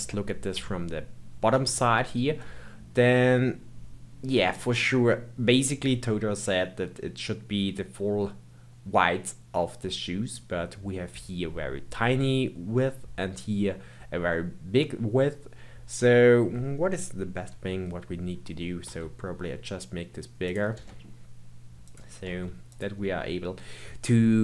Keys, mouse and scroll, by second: 1.8-4.8 shift+middle drag, 17.4 KP_1, 18.8 s.